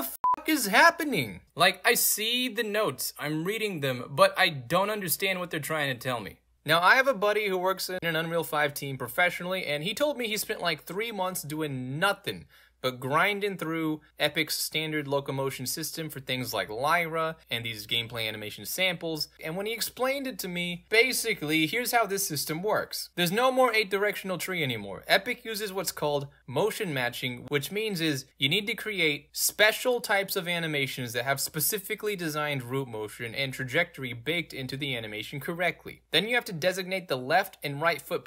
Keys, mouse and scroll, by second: 0.9 middle click, 0.9-1.2 scroll up 3, 1.1 middle click, 1.4 right click, 2.8 right click, 4.2-6.4 right drag, 6.4 scroll down 1, 6.5 click, 7.0 scroll down 2, 7.9 scroll down 2, 8.6-9.7 right drag, 9.9-10.2 scroll up 3, 10.5 right click, 10.7 scroll up 2, 11.2-14.6 right drag, 14.9 right click, 15.6 right click, 16.4 right click, 16.8 right click, 17.3 right click, 17.6 right click, 18.0 right click, 18.4 right click, 19.3-23.1 right drag, 23.1-26.4 scroll up 2, 26.4 click, 36.0-38.2 drag.